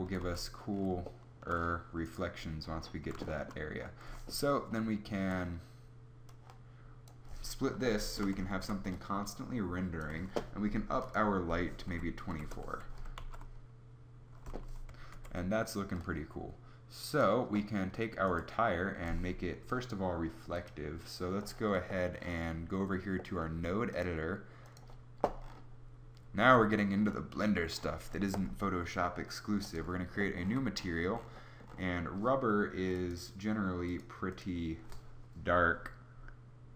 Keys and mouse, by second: 0.1 z, 8.4 ctrl+b, 9.4 click, 9.9 ctrl+b, 13.1 shift+z, 15.0 ctrl+b, 17.3 ctrl+b, 26.3 n, 29.7 n.